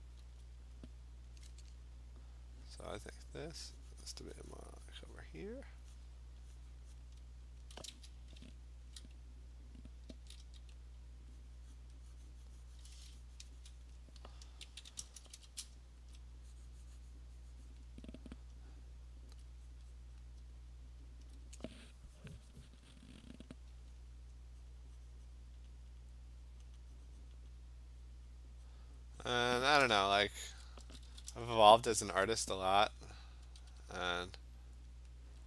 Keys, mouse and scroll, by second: 0.4 alt+click, 0.8 click, 5.2 click, 6.1 click, 6.7 click, 7.0 click, 7.6 alt+click, 7.7 alt+click, 8.4 [, 8.9 [, 9.0 [, 9.7 click, 10.0 click, 10.2 [, 10.4 [, 11.5 click, 11.9 click, 13.9 click, 15.1 ], 15.2 ], 15.4 ], 16.2 alt+click, 16.3 alt+click, 17.8 click, 19.4 alt+click, 19.8 click, 20.0 click, 20.4 alt+click, 21.3 alt+click, 23.0 click, 23.4 click, 23.6 click, 24.0 click, 24.3 alt+click, 24.7 click, 25.0 alt+click, 25.6 click, 25.8 alt+click, 25.9 click, 26.7 click, 27.4 click, 28.5 click, 28.7 click, 29.3 click, 29.6 click, 30.8-32.4 typing, 33.0 click, 33.5 ], 33.9 ], 34.5 click, 34.7 [, 34.9 click.